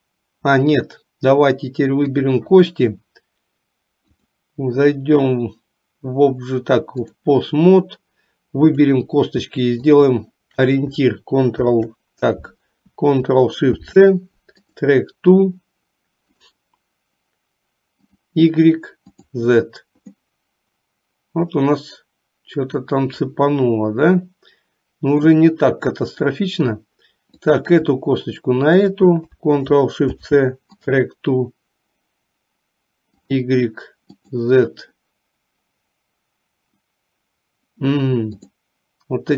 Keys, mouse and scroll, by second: 2.2 click, 4.2-7.4 drag, 8.9 click, 10.0 shift+click, 11.6 ctrl+p, 13.8 ctrl+shift+c, 16.4 click, 18.2 click, 19.2 click, 20.2-25.6 middle drag, 27.5 click, 28.7 shift+click, 30.2 ctrl+shift+c, 34.4 click, 38.5 click.